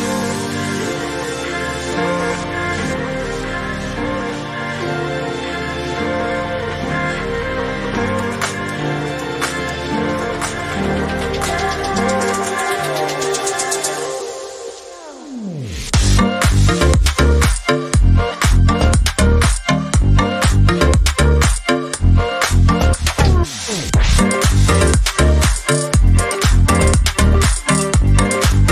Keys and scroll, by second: 1.5 Left, 1.6 Left, 1.7 Left, 1.9 Left, 8.7 Right, 9.4 Right, 10.2 Right, 10.2 Left, 11.0 Right, 11.5 Right.